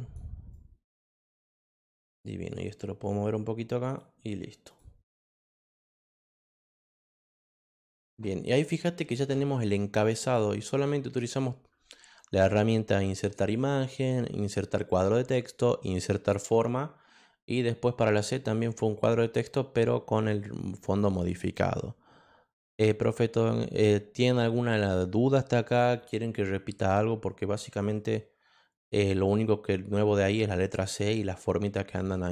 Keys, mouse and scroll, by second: 0.5 click, 2.0 click, 3.0 click, 4.7 click, 5.4-6.8 drag, 7.2 click.